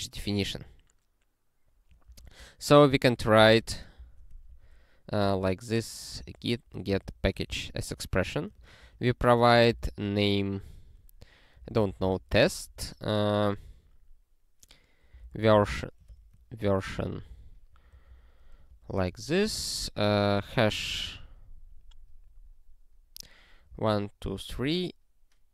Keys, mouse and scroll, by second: 2.1 ctrl+g, 3.1 click, 3.6 ctrl+e, 4.0 Return, 4.4-10.2 typing, 11.3-12.7 typing, 14.9-19.6 typing, 16.2 ctrl+BackSpace, 18.7 ctrl+f, 23.4-24.2 typing, 24.5 ctrl+f.